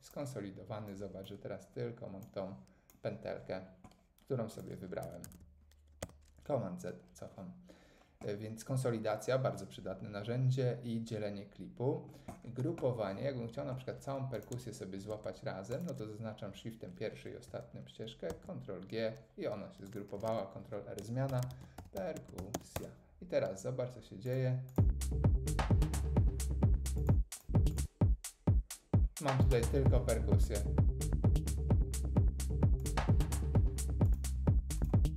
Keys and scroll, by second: 5.0 super+z, 6.0 Tab, 18.3 super+g, 20.3 super+r, 21.0-23.0 typing.